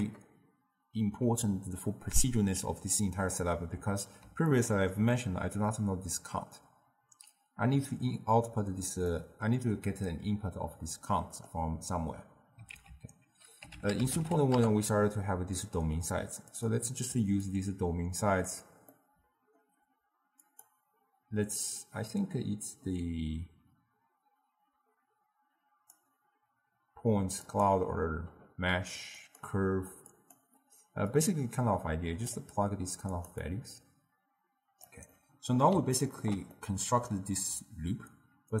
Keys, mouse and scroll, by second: 3.8 n, 4.6-8.2 ctrl+middle drag, 9.1-12.8 middle drag, 12.8 ctrl+a, 17.5 drag, 19.0-20.5 middle drag, 20.5-23.6 drag, 29.3-31.3 drag, 33.2 click, 33.5-35.3 drag, 35.3-38.6 middle drag.